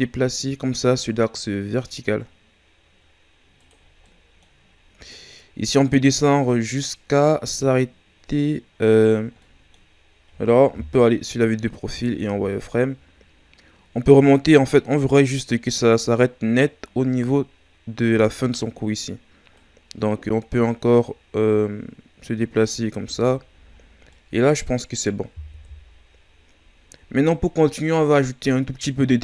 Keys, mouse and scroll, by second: 3.9 scroll down 2, 4.0 middle click, 4.6 scroll up 1, 5.8-8.8 drag, 9.4 middle click, 9.9-10.9 scroll up 2, 10.9 KP_3, 12.0 shift+scroll down 2, 12.3 z, 13.0-16.1 scroll up 2, 19.6-22.6 drag, 23.0 z, 23.7 scroll down 5, 24.1-25.5 middle drag, 25.5 KP_1, 26.8 shift+scroll down 2, 27.7-29.2 shift+scroll down 1.